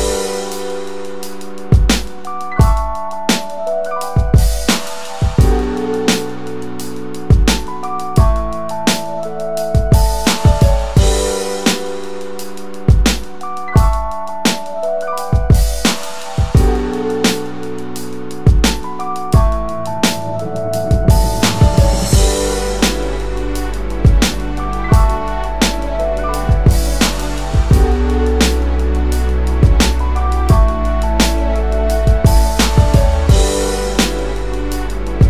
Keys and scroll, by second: 0.5-15.7 typing, 15.0 ctrl+space, 17.2 space, 20.6 space.